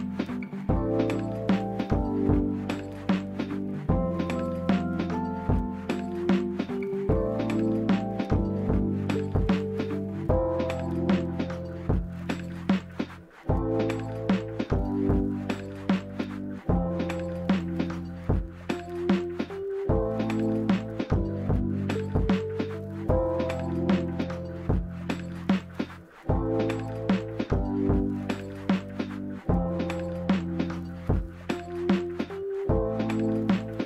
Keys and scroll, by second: 4.8 z, 16.4 d, 16.6 Escape, 18.3 typing, 18.5 Return, 21.2-22.0 typing, 23.4-24.1 typing, 25.8-26.5 typing.